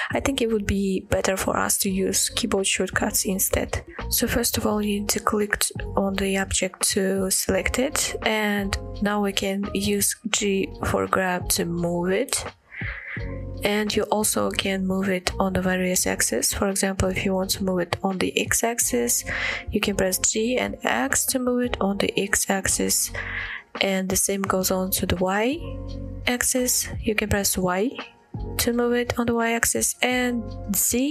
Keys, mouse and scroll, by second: 1.2-1.9 middle drag, 2.3-2.7 shift+middle drag, 3.3-3.6 middle drag, 4.6 click, 5.1-5.5 middle drag, 9.7 g, 13.5 right click, 18.7-19.3 middle drag, 19.9 g, 20.8 x, 27.5 y, 31.0 z.